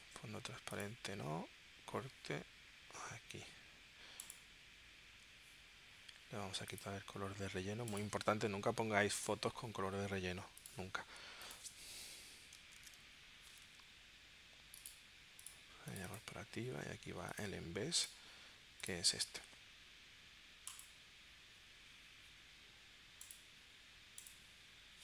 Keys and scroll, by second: 12.7 super+d.